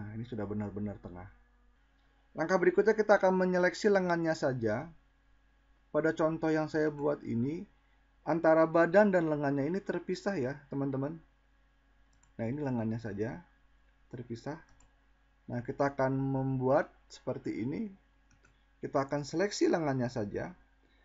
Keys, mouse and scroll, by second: 11.4-12.6 drag, 14.1-15.1 drag.